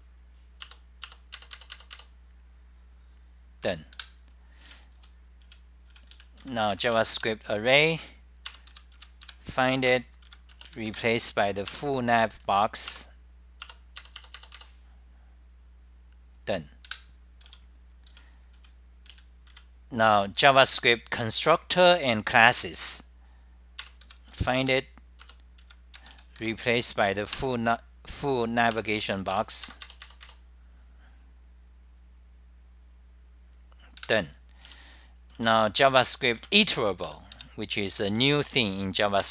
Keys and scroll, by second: 0.0 Return, 0.7 Return, 0.9-1.6 typing, 4.1 super+w, 4.7 w, 5.8-9.3 typing, 9.1 Home, 10.1 Return, 10.3 Home, 10.5 Home, 11.9-12.6 typing, 12.9 Return, 13.7 F10, 13.7 Return, 13.7 Delete, 16.5-17.5 typing, 18.6-25.1 typing, 25.4 Return, 25.6 Home, 27.6 Return, 28.8 Return, 29.4 Return, 32.4-34.7 typing, 38.1-38.8 typing.